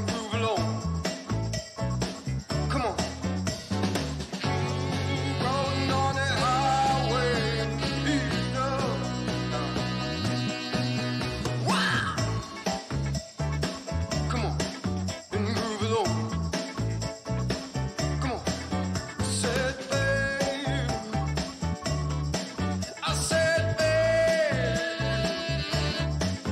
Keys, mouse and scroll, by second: 0.0 click, 2.9 click, 4.2 click, 5.0-8.1 drag, 10.3-13.6 drag, 15.3-19.8 drag, 21.1-22.3 drag, 24.7-25.3 scroll down 2, 25.4-26.2 scroll up 2, 26.4 click.